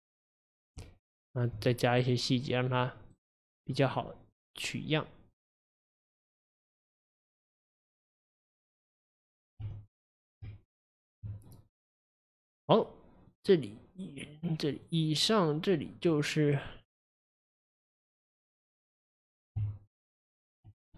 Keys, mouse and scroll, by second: 0.5 click, 0.8 Tab, 2.0-5.4 right drag, 5.4 click, 6.4 click, 6.9 click, 7.7-8.5 middle drag, 8.5-9.0 scroll down 2, 9.0-9.7 middle drag, 9.7 Tab, 10.5 Tab, 11.5 click, 13.3 click, 14.8-16.2 drag, 16.5 click, 16.9 click, 17.9-18.6 drag, 18.6-19.6 middle drag, 19.6 Tab.